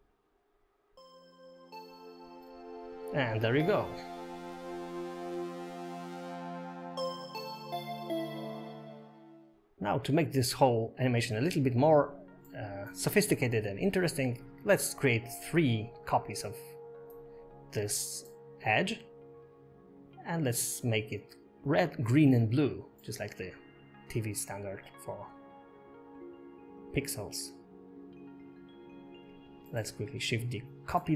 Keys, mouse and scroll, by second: 0.2 scroll down 5, 0.3 shift+middle click, 0.4-0.7 scroll up 4, 0.5 shift+middle click, 0.7 shift+middle click, 0.8 click, 1.0-2.3 typing, 1.2 click, 1.4 shift+middle click, 1.5 click, 2.0 click, 2.9 scroll down 5, 2.9 Tab, 3.1 shift+middle click, 3.2 scroll up 2, 3.4 click, 3.5 space, 4.8 space, 5.0 click, 5.2 0, 5.6 shift+middle click, 5.6 scroll up 2, 11.8 space, 12.8 click, 13.8 0, 15.0-15.3 scroll up 2, 15.6 shift+middle click, 16.6 click, 17.5 shift+middle click, 23.2 middle click, 24.2 scroll down 2, 25.3 click, 26.0 g, 27.6 shift+d, 29.7 shift+d.